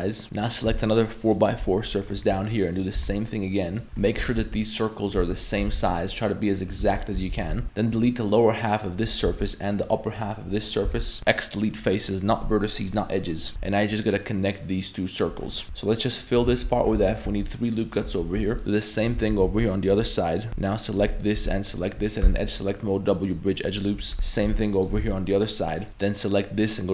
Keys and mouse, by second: 0.2 3, 0.4 right click, 2.2-5.6 typing, 3.8 shift+middle click, 6.8 ctrl+z, 7.2 ctrl+z, 7.6 3, 7.6 a, 7.6 b, 9.3 b, 10.9 x, 11.2 x, 13.5 ctrl+z, 13.5 f, 13.5 a, 15.6 shift+1, 16.2 shift+right click, 16.5 f, 16.9 ctrl+r, 18.0 click, 18.4 1, 18.9 shift+right click, 19.2 f, 19.5 ctrl+r, 20.5 2, 20.5 1, 20.9 ctrl+right click, 21.2 shift+right click, 21.8 ctrl+right click, 22.2 w, 24.0 2, 24.1 right click, 24.4 shift+right drag, 24.8 ctrl+right click, 25.0 w, 25.9 1, 25.9 a.